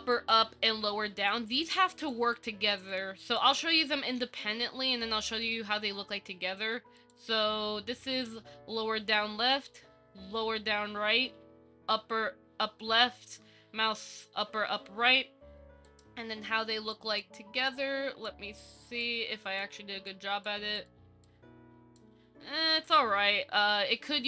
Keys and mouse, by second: 2.2 click, 5.4 shift+click, 7.2 click, 9.9 Down, 16.0 click, 17.1 click, 17.9 click, 19.3 click, 20.3 click, 21.5 click.